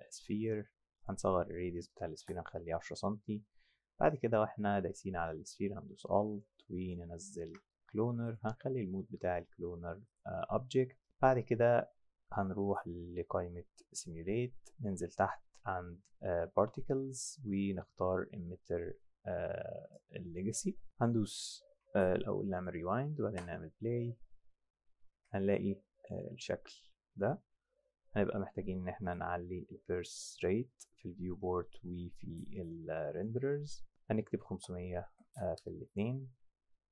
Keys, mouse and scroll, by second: 1.0 click, 2.0 KP_1, 2.1 KP_0, 2.3 KP_Enter, 6.6 alt+click, 8.3 click, 10.1 click, 14.0 click, 19.9 click, 22.5 click, 23.2 F8, 25.1 F8, 27.2 click, 29.1 click, 34.2-35.2 typing, 34.8 Tab, 35.6 KP_Enter.